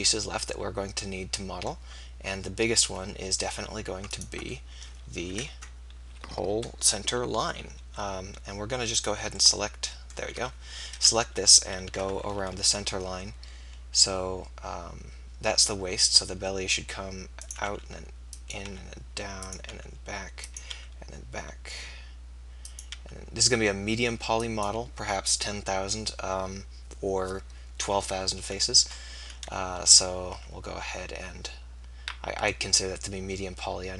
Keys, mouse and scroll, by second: 5.4 KP_3, 9.0-10.8 right drag, 10.8 KP_3, 12.3 e, 17.8 e, 18.7 e, 19.7 e, 20.5-23.0 drag, 21.2 e, 23.0 e, 30.2 e.